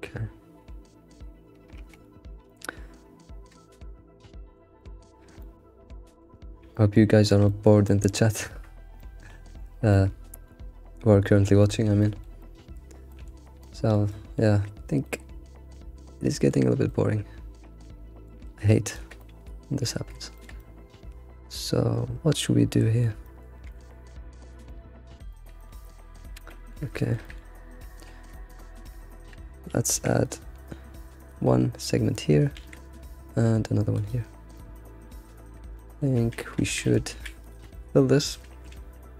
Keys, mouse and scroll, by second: 2.2 scroll down 2, 2.5-5.2 shift+middle drag, 5.2 scroll down 2, 5.4 shift+middle click, 6.4-6.7 scroll up 2, 6.7 shift+middle click, 7.2 scroll up 2, 7.4-8.7 shift+middle drag, 8.7 scroll down 3, 9.0-12.7 shift+middle drag, 12.7-13.1 scroll up 3, 13.1 shift+middle click, 13.4 scroll down 3, 13.6 shift+middle click, 14.5-15.0 scroll up 3, 15.0-16.7 shift+middle drag, 16.7 scroll down 2, 16.8-18.8 middle drag, 18.8 alt+click, 19.2-20.4 middle drag, 20.6-23.7 middle drag, 23.7 g, 24.7-25.9 middle drag, 25.9 scroll up 2, 26.4-27.5 middle drag, 27.5-27.9 scroll up 4, 28.3 shift+middle click, 28.5 scroll up 3, 29.1 shift+middle click, 29.3-29.9 scroll up 1, 29.9 ctrl+r, 32.5 ctrl+r, 34.3 scroll down 2, 34.5-36.2 middle drag, 36.2 a, 36.6 a, 36.9 a, 37.2 a, 37.4 alt+click, 37.7-38.7 middle drag, 38.7 alt+Left, 38.7 ctrl+s.